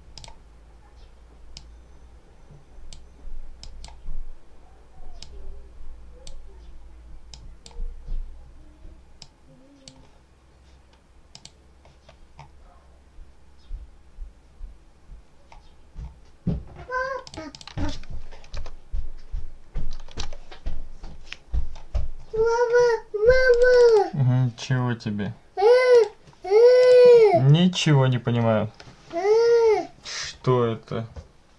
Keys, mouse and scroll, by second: 0.0 click, 1.4-3.0 drag, 3.5 click, 5.1-6.3 drag, 7.2-7.7 drag, 9.1 click, 10.3 scroll up 2, 10.5-11.5 drag, 11.9-12.5 scroll up 2, 15.9 scroll up 2, 17.1 click, 18.3 2, 19.8 Return, 20.0 1, 21.7-22.3 scroll up 2, 23.4 click, 25.8 click, 26.7 click.